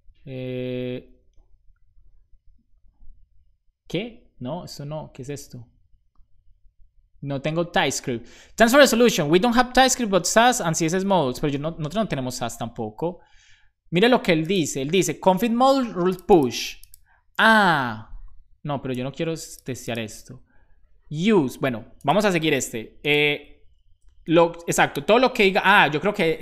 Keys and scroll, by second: 23.9 Left, 25.0 Right, 26.0-26.4 typing.